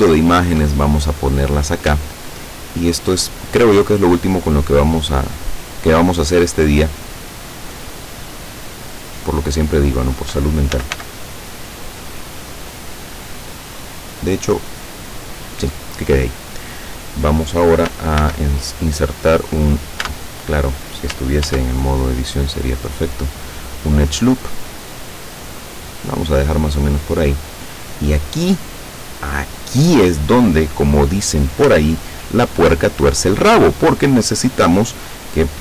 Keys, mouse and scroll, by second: 0.2 shift+middle click, 0.8-1.4 shift+scroll up 2, 3.1-4.7 drag, 5.9-10.0 drag, 10.5-11.5 typing, 15.5 click, 18.3 ctrl+r, 20.0 Tab, 21.5 ctrl+r, 22.7 click, 25.8 click.